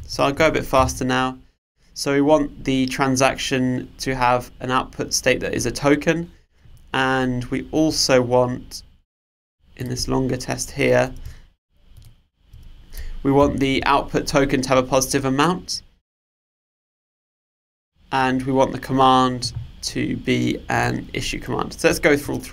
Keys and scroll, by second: 0.8 super+/, 13.5 super+/.